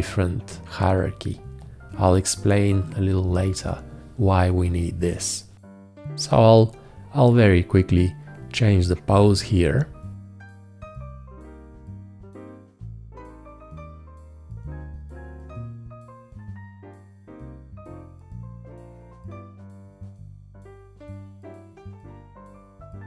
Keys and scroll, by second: 17.1 shift+,.